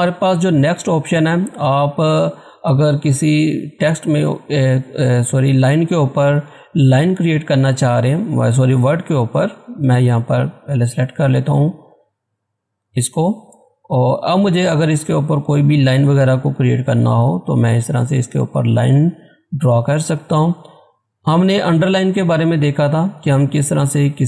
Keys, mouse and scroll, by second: 0.5 click, 8.3 click, 12.1-14.2 drag, 20.9 click.